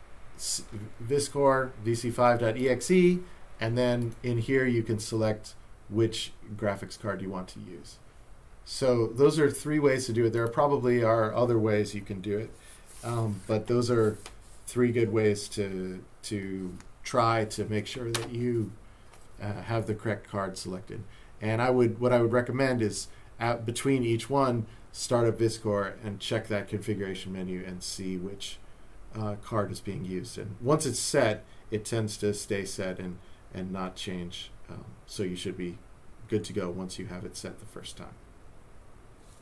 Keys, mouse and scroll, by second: 2.6 click, 4.0 click, 10.4 click.